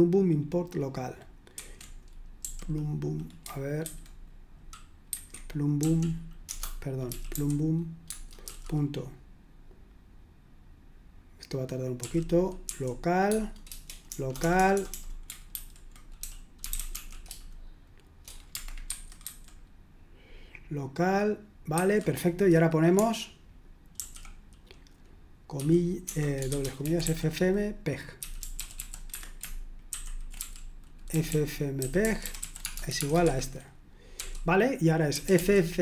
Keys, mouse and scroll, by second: 1.6 super+1, 2.4 typing, 3.8 super+2, 4.0 typing, 5.1 super+1, 5.7 typing, 7.0-8.9 typing, 8.1 Tab, 12.0-12.6 typing, 13.3 Tab, 14.1-14.8 typing, 15.5 ctrl+w, 16.2-17.4 typing, 21.8 super+1, 23.9 [, 25.5 0, 26.6-35.8 typing.